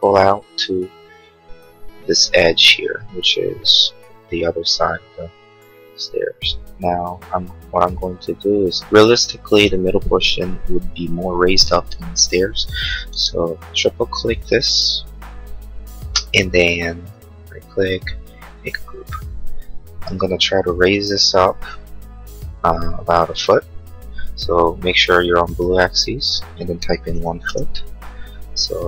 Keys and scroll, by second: 13.1 space, 26.9-27.8 typing, 28.3 Return.